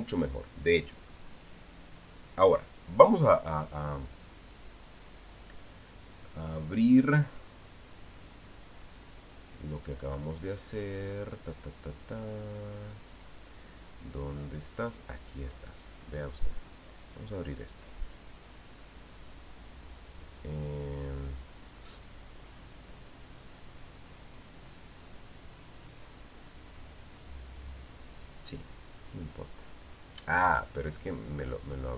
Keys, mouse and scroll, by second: 6.1 click, 8.7 click, 14.5-14.9 scroll down 1, 16.0 click, 19.4 click, 28.9 click.